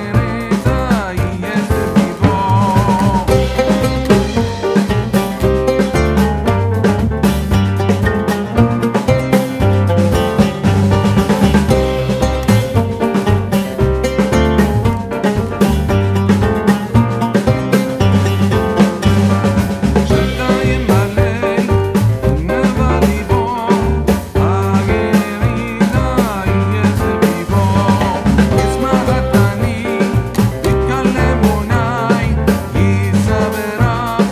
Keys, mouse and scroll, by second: 6.8 click, 8.6-12.6 drag, 12.6 typing, 14.0 shift+click, 15.2 ctrl+g, 16.0-19.7 drag, 20.5 alt+scroll down 1, 21.5-22.3 alt+scroll up 1, 23.0 click, 25.2-27.6 shift+drag, 34.0 click.